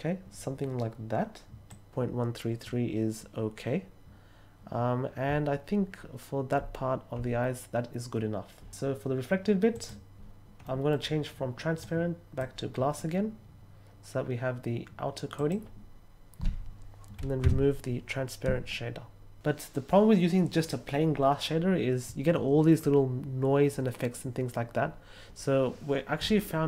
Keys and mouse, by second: 1.6 click, 9.7 click, 10.6 middle click, 11.7-12.3 drag, 15.3 click, 17.4 x.